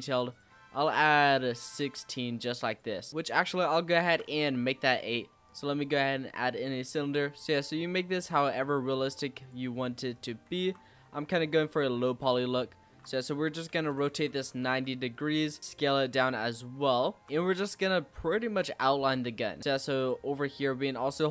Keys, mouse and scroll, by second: 3.2 x, 4.0 shift+a, 6.5 click, 10.7 Tab, 12.0 r, 14.6 s, 16.0 g, 17.0 shift+middle click, 17.4-18.1 scroll up 8, 18.1 shift+middle click, 18.8-19.3 scroll up 1, 19.3 g, 20.2 z.